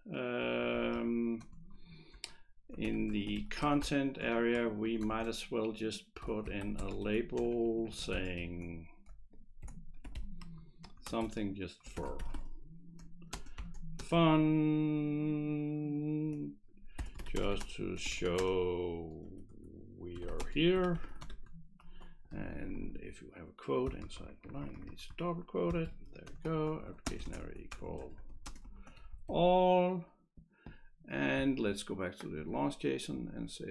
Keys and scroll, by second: 0.5 Up, 0.8 Right, 1.0 Right, 1.4 Return, 1.8 d, 3.2-14.1 typing, 4.6 Right, 4.9 Return, 10.9 Return, 16.8-21.8 typing, 22.0 Left, 22.3 Left, 22.5 Left, 22.7 Left, 26.3-29.8 typing.